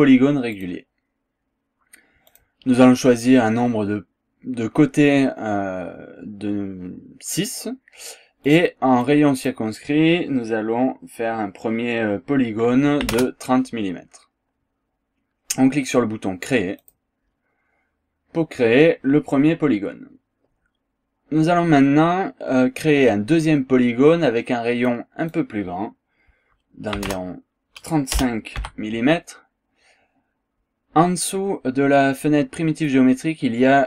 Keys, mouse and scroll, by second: 0.5 click, 2.3 click, 8.4 click, 9.0 click, 13.0 KP_3, 13.1 KP_0, 16.8 click, 18.5 scroll down 1, 19.3-19.7 scroll down 1, 19.7 scroll up 1, 24.9 click, 26.9 KP_3, 27.1 KP_0, 28.6 BackSpace, 28.6 KP_5.